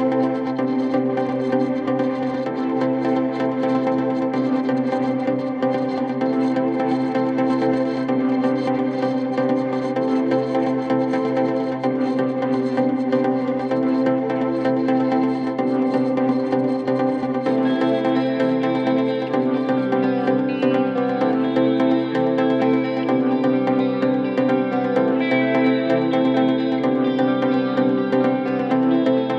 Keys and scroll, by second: 2.0 3, 3.6 ], 4.4 ], 5.4 ], 6.2 ], 8.5 ,, 15.8 ctrl+z, 17.8 ctrl+d, 18.1 Escape, 19.3 ctrl+z, 20.1 ctrl+z, 20.8 Escape, 22.5 4.